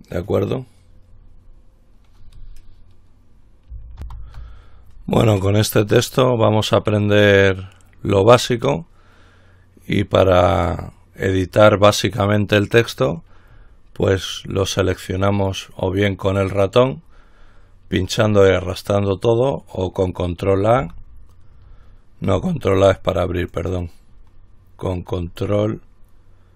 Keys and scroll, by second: 4.3 ctrl+r, 21.1 ctrl+a.